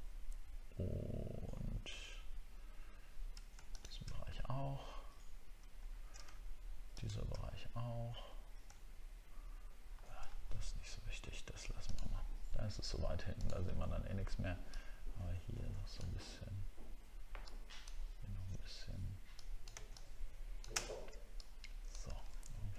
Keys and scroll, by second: 5.8 alt+scroll up 1, 8.6 alt+scroll up 1, 9.8 alt+scroll down 1, 22.4 alt+scroll down 1.